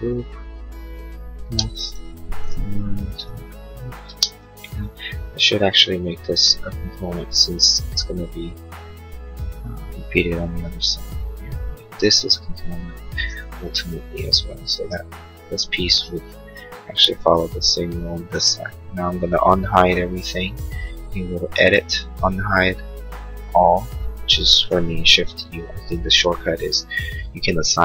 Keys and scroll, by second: 2.8 p, 4.0 space, 4.5 Escape, 10.0 Escape.